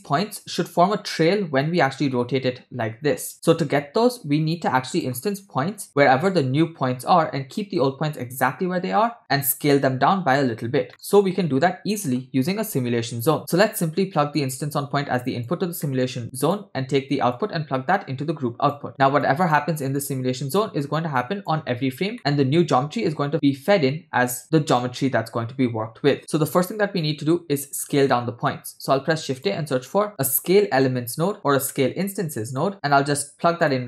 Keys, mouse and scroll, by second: 2.0-3.3 drag, 4.9 click, 10.9 middle click, 11.4 shift+a, 14.4-15.6 drag, 15.9 middle click, 16.2 click, 17.3-18.7 drag, 18.9 click, 19.2 click, 20.0-20.6 drag, 21.2 click, 22.1 middle click, 28.7 shift+a.